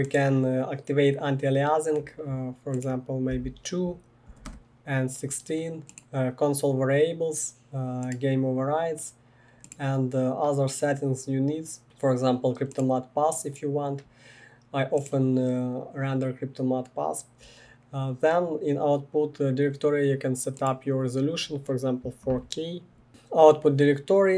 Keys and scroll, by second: 3.3 2, 4.3 Return, 4.5 Return, 23.1 Tab, 23.1 Return, 23.1 typing.